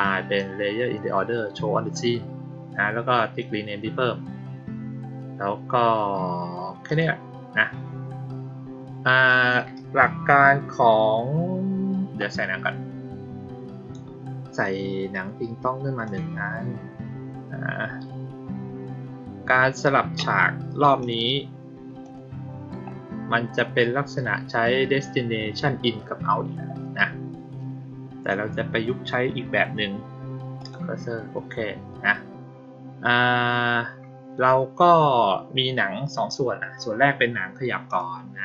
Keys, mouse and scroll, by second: 6.7 click, 15.9 click, 20.9 click, 21.9 click, 30.4 click, 37.7 click.